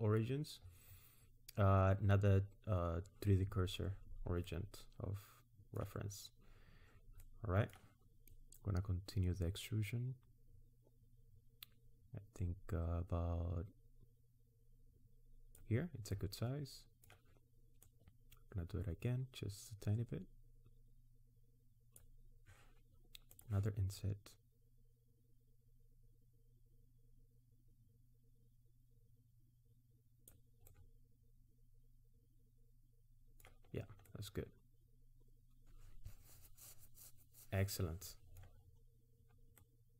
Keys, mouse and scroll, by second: 4.5 middle click, 7.2 middle click, 8.3 click, 16.1 middle click, 17.8 click, 23.4 click, 24.0 click, 30.7 middle click, 33.7-34.3 scroll down 3, 34.1 middle click, 38.7-39.1 scroll up 4, 39.1-39.6 scroll down 2, 39.6 middle click.